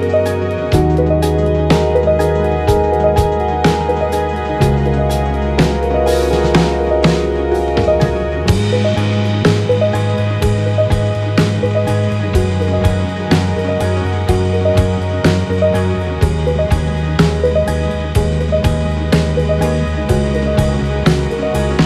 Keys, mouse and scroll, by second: 0.7 click, 1.7 click, 3.9 KP_1, 8.2 Tab, 10.9 KP_5, 19.8 b.